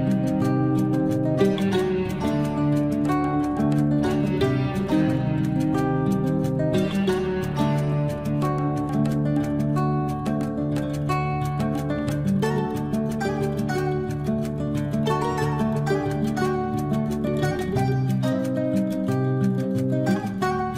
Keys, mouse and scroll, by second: 2.5 Escape, 4.4 t, 5.4 click, 6.7 9, 7.1 Return, 7.7 Escape, 8.6 l, 9.4 click, 11.7 space, 12.4 click, 13.4 Delete, 18.1 l, 19.4 Escape, 20.0 space, 20.5 click.